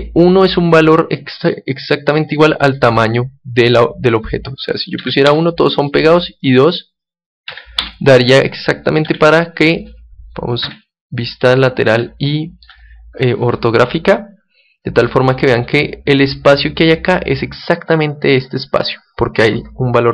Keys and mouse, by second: 6.1-8.6 drag, 9.0 KP_1, 10.6 KP_5, 11.4-14.7 middle drag, 15.0-17.0 middle drag.